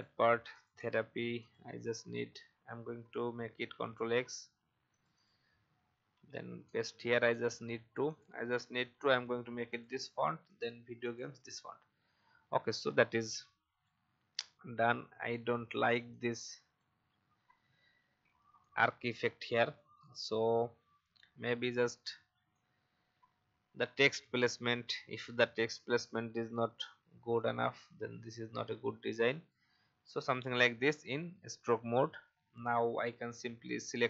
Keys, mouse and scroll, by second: 0.1 i, 0.7 v, 1.3 click, 3.6 ctrl+x, 4.9 click, 6.1 ctrl+v, 7.7 space, 8.0 click, 8.9 i, 9.7 click, 9.9 v, 10.6 i, 11.0 click, 11.2 v, 12.6 click, 15.4 Delete, 16.1 click, 17.1 Delete, 18.5 alt+scroll up 1, 19.1-19.5 alt+scroll down 1, 20.4-24.9 drag, 27.3-30.1 alt+shift+drag, 30.8 shift+x, 31.3 shift+v, 33.2 alt+scroll down 1, 33.9 shift+click.